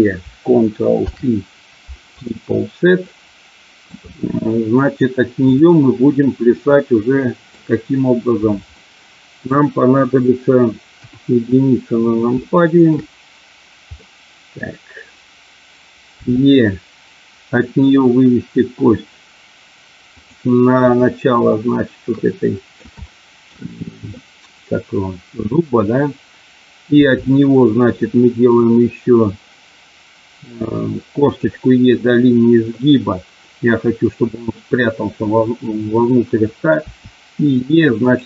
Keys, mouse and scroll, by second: 0.9 ctrl+p, 3.0 middle click, 6.5 middle click, 8.7 middle click, 10.9 KP_1, 12.3 middle click, 13.9 middle click, 16.2 e, 20.2 click, 21.6-22.8 shift+middle drag, 23.1 shift+middle click, 23.7 middle click, 26.9 e, 31.2 click, 36.8 e, 38.1 click.